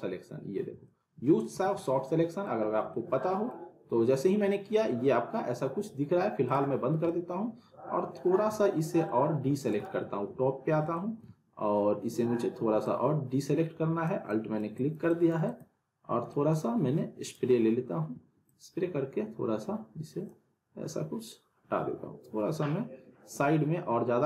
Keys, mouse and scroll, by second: 0.8-1.5 alt+middle click, 1.5 z, 1.8-2.4 alt+middle click, 2.7 scroll up 1, 2.9-4.0 middle drag, 6.4 click, 6.8 scroll down 1, 7.0-8.3 alt+middle drag, 9.4 alt+w, 9.7 alt+right click, 9.8 alt+w, 10.9 middle click, 12.8-14.1 alt+drag, 15.9-16.3 scroll up 1, 17.2 click, 18.5-20.4 alt+drag.